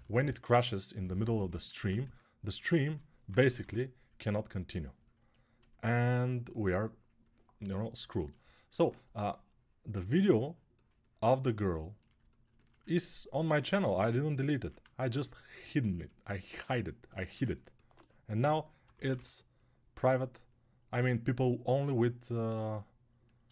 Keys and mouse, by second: 1.5-8.2 ctrl+alt+right drag, 2.6 2, 3.0 [, 3.2 [, 3.4 [, 5.4 1, 13.3-17.4 ctrl+right drag, 18.2 g, 18.6 ], 18.8 ], 18.9 ].